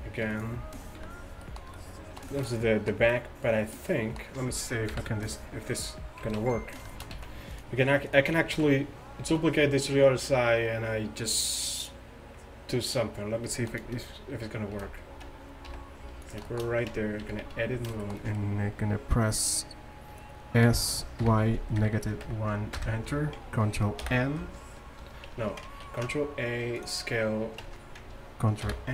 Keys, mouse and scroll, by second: 1.0 KP_5, 1.5 drag, 5.0 KP_7, 6.3 z, 7.2 z, 7.6-8.1 middle drag, 8.5 z, 9.3 z, 13.1-14.8 middle drag, 14.8 shift+d, 16.5-16.9 middle drag, 16.9 Tab, 17.3 a, 17.5 a, 20.7 s, 24.2 ctrl+n, 25.3 Tab, 25.9 ctrl+a, 27.7 Tab, 28.7 ctrl+n.